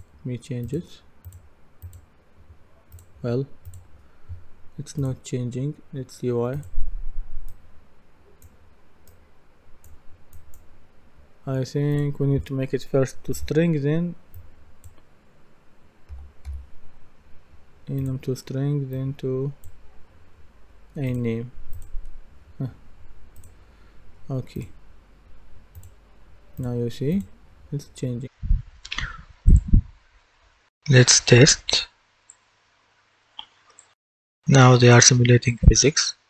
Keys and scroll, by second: 13.3 Delete, 16.1 typing, 34.0 w.